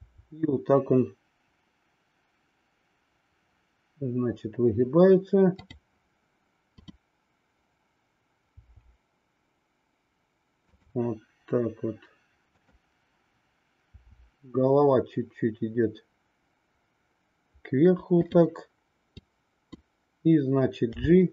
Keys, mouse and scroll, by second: 0.0 r, 6.6-8.1 drag, 8.5 r, 12.5-13.9 drag, 14.0 r, 19.2 click, 20.9 g.